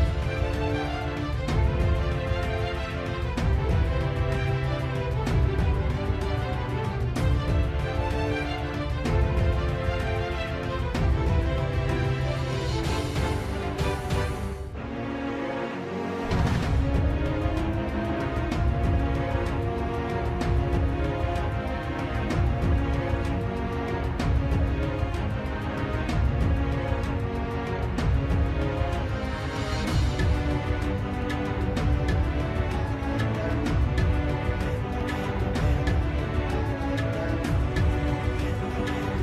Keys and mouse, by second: 2.3 middle click, 3.8 shift+middle click, 4.9 KP_1, 5.7 shift+middle click, 7.7 click, 8.2 middle click, 9.4 middle click, 11.2 shift+click, 13.8 i, 18.8 KP_7, 20.8 shift+middle click, 24.2 shift+middle click, 25.3 alt+e, 33.0 shift+middle click, 35.2 s.